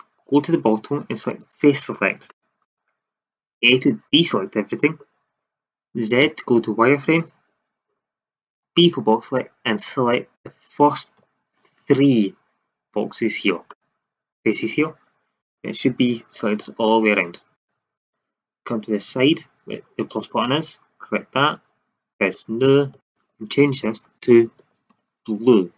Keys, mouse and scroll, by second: 3.5 a, 6.2 z, 8.5 b, 11.6 z, 16.3 middle click, 16.7 middle click, 16.9 middle click, 20.1-21.9 drag, 22.1-25.7 drag.